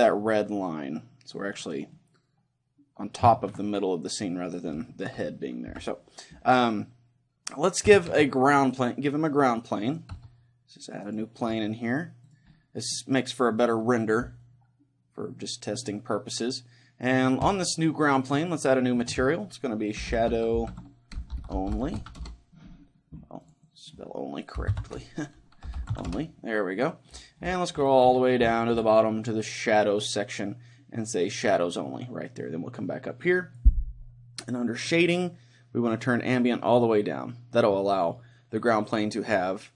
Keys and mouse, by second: 1.7-3.6 drag, 1.9-5.7 middle drag, 5.7 KP_3, 6.7-8.9 middle drag, 8.1 shift+a, 10.1 s, 11.1-14.1 drag, 11.5 s, 12.5-14.5 middle drag, 17.4-22.1 drag, 23.4-26.1 drag, 31.3-38.9 drag.